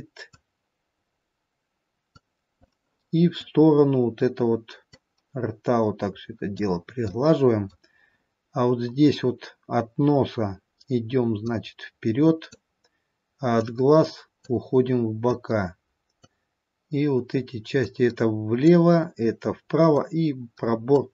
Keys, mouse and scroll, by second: 0.8 click, 2.9 middle click, 5.1 click, 7.4 middle click, 8.4-8.9 scroll up 3, 9.2-9.6 scroll down 1, 11.3-11.6 scroll down 2, 11.6 click, 13.8 click, 18.0 click, 20.1 click.